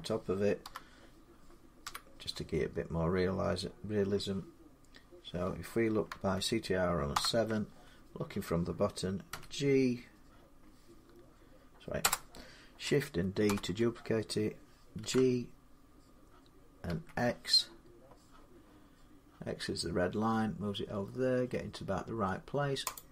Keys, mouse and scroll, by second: 0.4 7, 1.6 1, 6.9 ctrl+7, 9.1 g, 11.8 Return, 13.3 shift+d, 14.8 g, 16.7 x, 22.8 click.